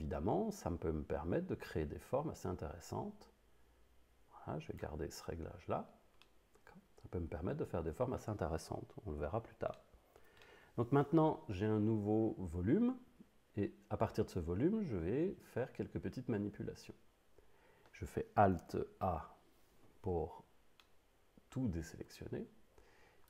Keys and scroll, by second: 19.1 alt+a.